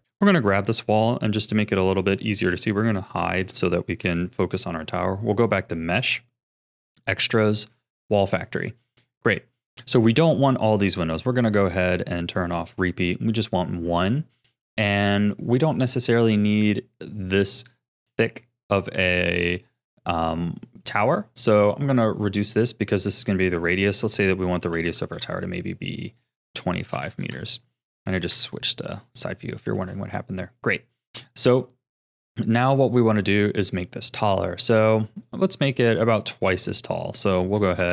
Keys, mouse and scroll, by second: 0.1 click, 3.0 h, 4.0 shift+a, 8.6-9.0 scroll down 3, 9.0 shift+middle click, 9.6-10.0 scroll up 3, 10.0-11.9 shift+middle drag, 11.9-12.4 scroll down 2, 12.4 click, 19.1-22.2 scroll up 3, 23.6-25.1 drag, 25.1 KP_3, 26.0-28.3 drag, 28.3 KP_1, 29.0-32.5 shift+middle drag, 36.8-37.9 drag.